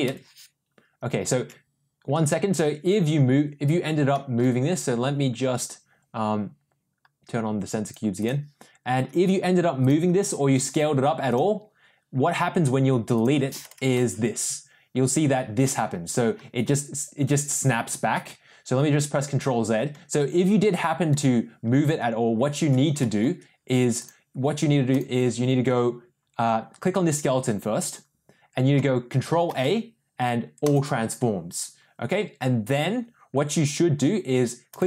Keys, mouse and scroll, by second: 0.2 Delete, 1.7 ctrl+z, 4.1 middle click, 7.8 click, 8.1 click, 9.2 g, 10.5 s, 14.1 Delete, 18.4 ctrl+z, 22.9 middle click, 23.9 click, 24.8 click, 29.4 ctrl+a, 34.7 click.